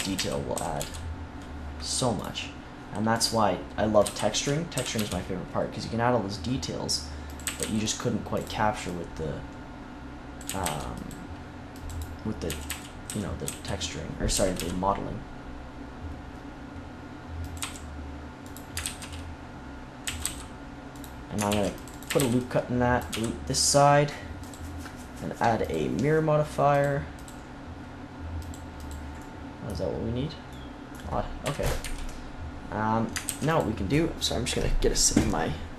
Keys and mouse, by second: 0.1 a, 0.5 s, 0.7 x, 4.0 l, 4.7 s, 7.4 a, 7.5 c, 10.4 a, 10.6 c, 12.4-14.3 typing, 17.5-18.5 drag, 17.6 e, 18.8 ctrl+z, 19.9 right click, 20.0 a, 20.1 c, 20.9 click, 21.4 ctrl+r, 22.0 a, 22.1 c, 23.0 x, 26.6-30.4 drag, 31.4 KP_3, 31.7 KP_1, 33.2 ctrl+s.